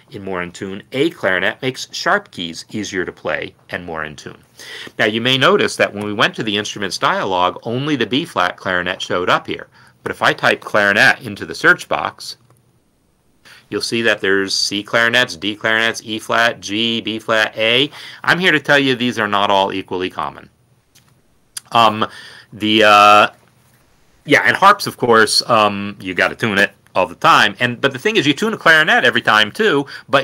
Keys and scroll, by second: 6.3 typing, 10.6-13.1 typing.